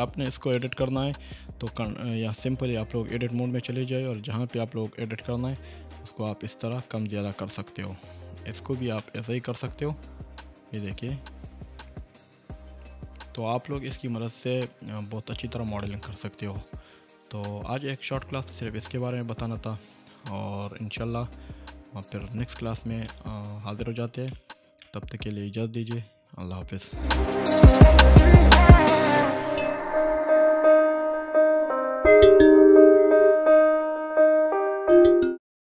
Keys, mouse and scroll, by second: 0.5 shift+middle click, 1.1 Tab, 4.6-5.1 scroll up 1, 5.1-5.7 drag, 7.8 click, 9.0-9.6 middle click, 9.8-13.6 drag, 13.8-14.8 middle click, 15.4 click, 15.8-16.4 middle drag, 17.2 click, 19.7-20.1 drag, 23.1-26.7 middle click, 24.3 shift+middle click, 25.3-26.7 scroll up 2, 26.7 scroll up 1, 27.3 scroll up 1.